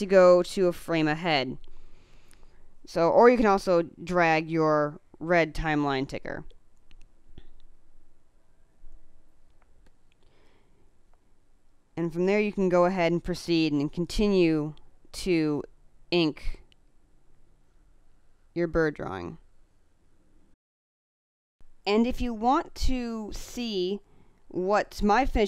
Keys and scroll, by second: 9.6 space.